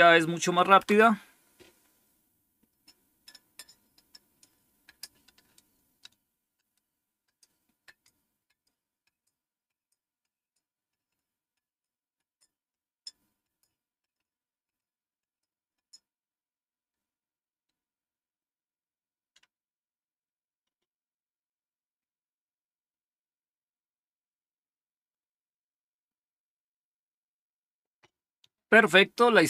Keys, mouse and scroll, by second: 0.7 Return.